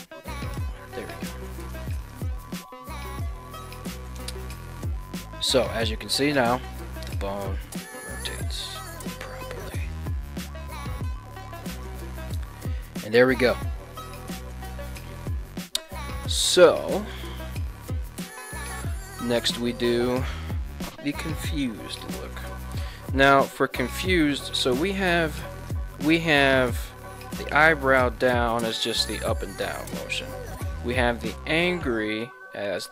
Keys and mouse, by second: 3.1 right click, 3.5 ctrl+Tab, 4.5 r, 11.7 right click, 17.0-18.1 middle drag, 18.5 KP_1, 19.3 ctrl+Tab, 19.5 right click, 24.5 right click, 25.3 ctrl+Tab, 25.7 right click, 26.7 g, 30.0 right click, 31.0 r, 32.8 right click.